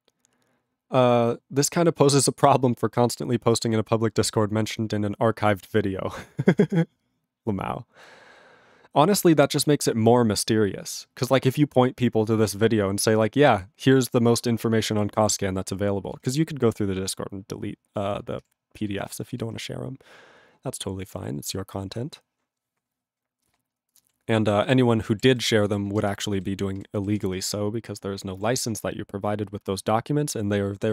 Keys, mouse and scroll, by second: 24.7 click, 25.3 ctrl+s, 25.7 click, 25.7 click, 26.1 ctrl+space, 26.4 ctrl+alt+b, 26.8 ctrl+g, 27.2 ctrl+s, 28.5 ctrl+s.